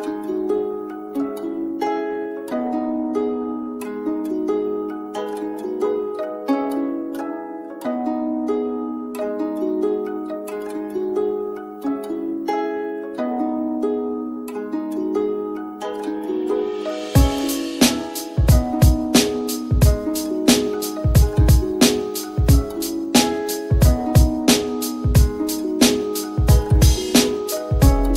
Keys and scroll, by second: 21.1 F10, 21.9 F10.